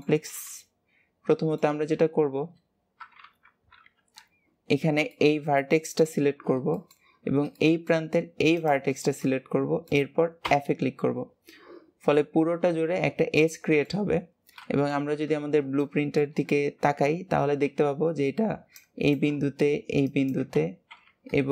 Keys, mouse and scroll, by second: 0.1 alt+z, 3.2 KP_1, 5.0-8.4 middle drag, 8.4 shift+click, 9.1-10.4 middle drag, 10.4 f, 13.3-14.5 middle drag, 14.5 KP_3, 15.7 shift+middle click, 16.4 scroll up 2, 21.3-21.5 scroll down 1.